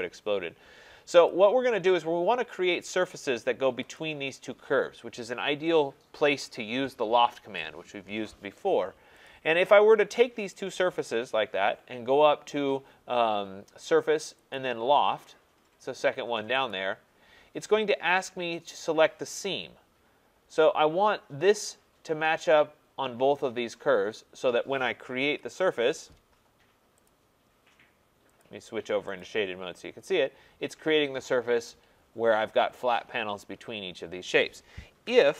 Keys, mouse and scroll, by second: 1.3 click, 4.0 click, 9.3 click, 10.6 click, 14.6 click, 16.7 click, 25.2 Return, 27.1 click, 28.4 click, 29.2 click, 34.9 click, 35.0 ctrl+z.